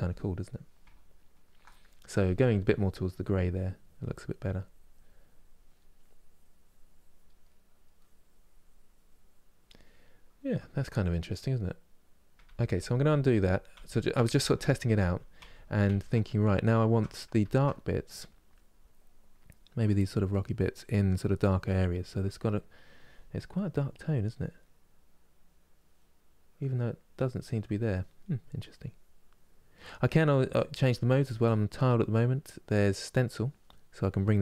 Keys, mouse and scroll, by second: 2.8-7.2 drag, 7.2 middle click, 7.7-9.7 drag, 9.7-12.2 middle drag, 12.2 ctrl+z, 12.5 ctrl+z, 12.7 ctrl+z, 12.9 ctrl+z, 13.1 ctrl+z, 13.5 ctrl+z, 13.9 ctrl+z, 14.4 ctrl+z, 14.7 ctrl+z, 15.1 ctrl+z, 15.6 ctrl+z, 16.0-17.1 middle drag, 17.1 ctrl+z, 17.4 middle click, 18.1-20.1 drag, 20.1 middle click, 20.5-27.9 drag, 27.9 middle click, 28.4-33.8 drag, 31.1 middle click, 33.8-34.4 right drag.